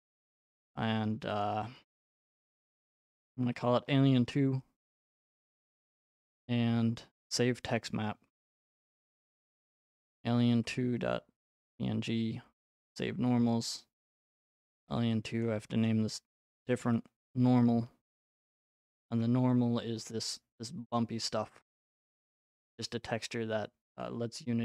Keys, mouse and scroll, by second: 1.4 click, 2.2-4.0 typing, 4.2 Return, 7.3 click, 9.4-11.1 typing, 11.5 Return, 13.0 click, 14.2-17.4 typing, 18.5 Return, 19.2-19.7 scroll, 21.9-23.5 scroll.